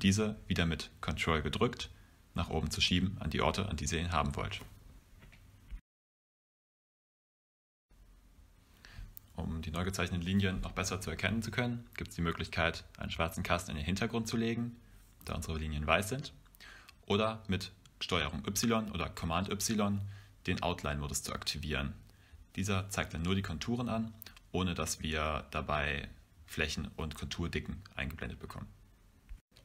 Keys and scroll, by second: 13.6 v, 24.2 super+y, 26.4 super+y, 27.8 p.